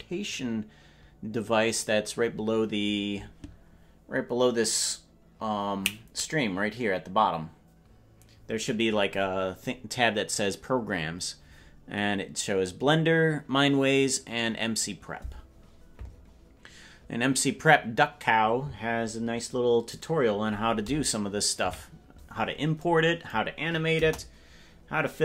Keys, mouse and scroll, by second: 20.0 right click, 21.6 KP_Decimal, 23.9 KP_0, 24.9 scroll down 1.